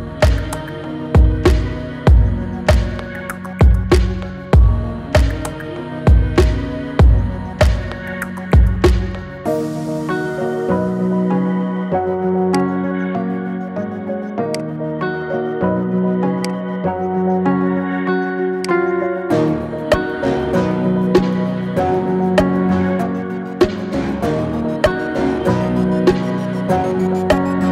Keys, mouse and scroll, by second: 4.3-5.1 scroll up 7, 5.1-7.3 shift+middle drag, 7.3-7.9 scroll down 2, 7.9-9.3 middle drag, 9.3 ctrl+z, 10.0-10.9 scroll down 1, 10.9 s, 13.2 s, 15.1 s, 16.9 s, 18.8-19.3 scroll down 6, 19.3-21.5 middle drag, 21.5-21.9 scroll up 3, 21.9-27.7 middle drag.